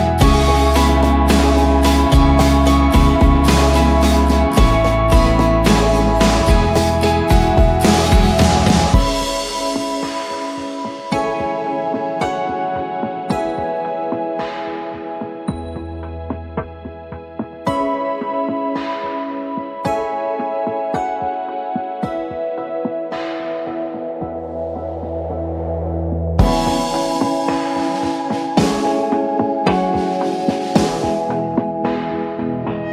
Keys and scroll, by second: 0.4 ctrl+z, 2.6 Return, 3.0 Right, 3.5 ctrl+-, 14.8-19.4 typing, 21.7 8, 22.2 8, 22.4 Return, 23.7-24.2 typing, 24.4 Return, 25.6 Return, 25.9 v, 32.1-32.9 typing.